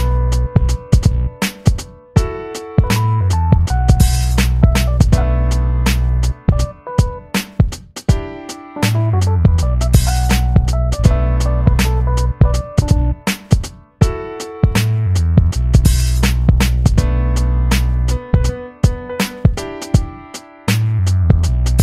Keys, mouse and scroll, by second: 0.5-8.0 middle drag, 8.0-9.5 drag, 10.9-21.8 drag.